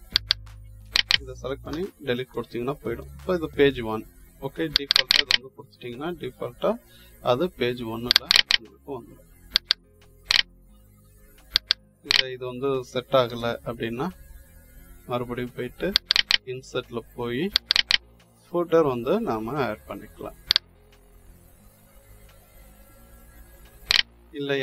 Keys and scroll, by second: 1.6 Delete, 13.2 Delete.